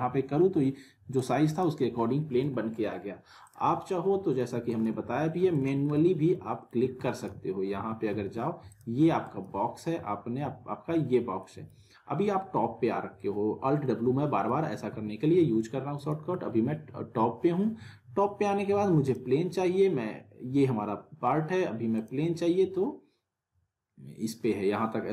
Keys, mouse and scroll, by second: 0.1 w, 1.1-1.8 drag, 3.8-4.5 alt+middle click, 4.5 alt+w, 4.7 alt+right click, 4.8 alt+w, 5.4 w, 5.5 right click, 5.6 w, 5.9-6.9 alt+middle click, 7.0 alt+w, 7.1 alt+right click, 7.2 alt+w, 8.7 click, 9.1 w, 9.2 right click, 9.3 w, 11.4 middle click, 14.3 middle click, 14.5 w, 15.9 right click, 16.3 alt+w, 19.0 click, 22.0 click.